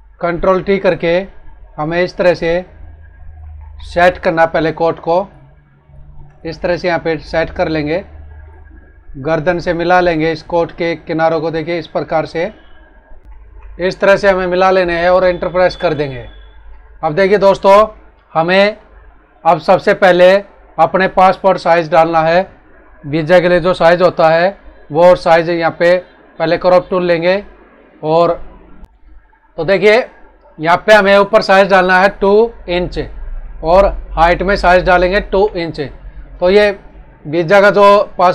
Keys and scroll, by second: 0.1 ctrl+t, 3.4 ctrl+=, 13.2 Left, 13.3 ctrl+-.